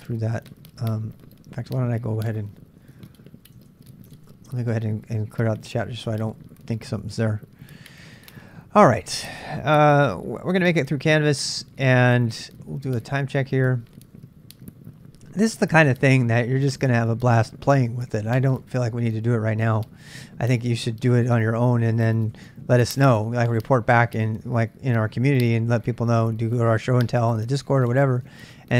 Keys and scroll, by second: 5.1-5.9 typing, 6.2 Return, 6.9 super+Tab, 9.9-14.2 typing.